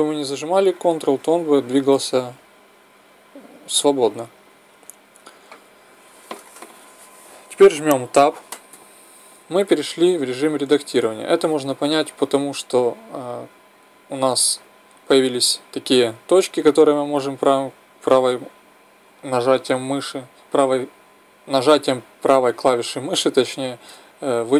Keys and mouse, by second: 0.1-4.8 drag, 4.8 ctrl+z, 8.7 Tab, 15.3-24.5 right drag.